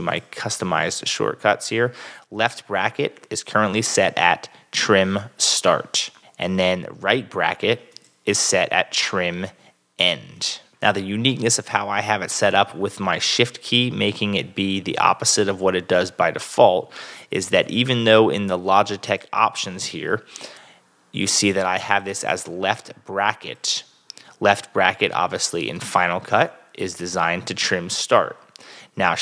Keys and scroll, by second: 17.7 super+Tab.